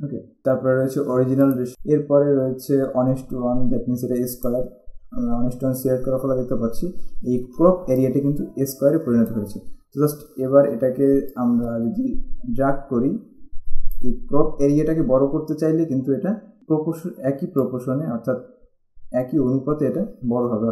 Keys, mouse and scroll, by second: 1.7 click, 4.6 click, 8.1 click, 11.4 click, 17.8 click.